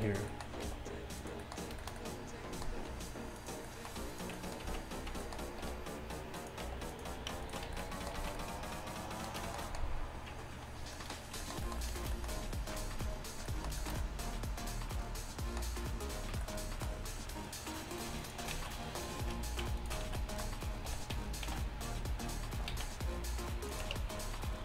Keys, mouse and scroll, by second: 0.0 shift+Tab, 0.7 g, 2.9 g, 4.7 z, 5.0 z, 5.7 r, 6.7 g, 7.7 z, 8.2 z, 14.2 middle click, 14.9 middle click, 16.5 middle click, 16.9 middle click, 17.5-21.3 middle drag, 18.6 z, 20.1 z, 20.9 r, 24.0 shift+Tab.